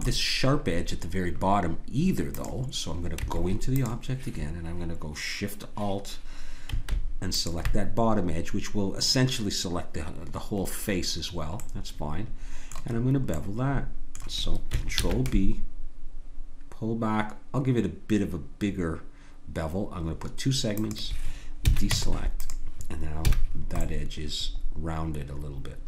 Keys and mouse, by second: 2.3-4.3 drag, 3.1 Tab, 7.3-9.6 drag, 11.6-14.9 drag, 14.9 ctrl+b, 21.6 a, 21.9 Tab, 23.3 a.